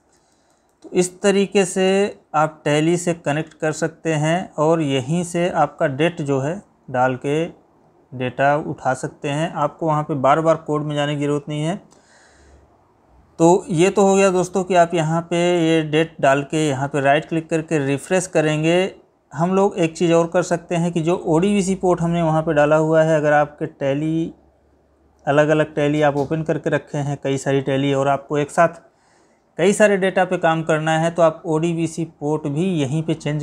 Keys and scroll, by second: 1.1 Left.